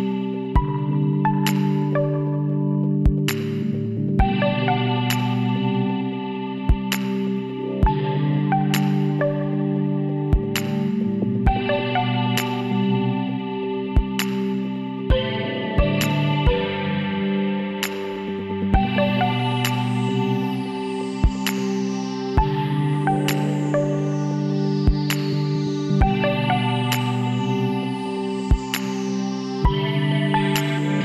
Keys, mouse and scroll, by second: 3.0 click, 3.8-5.6 middle drag, 5.6 KP_7, 6.9 middle click, 8.1 middle click, 8.9-23.7 middle drag, 24.3 Tab, 27.6-31.0 middle drag.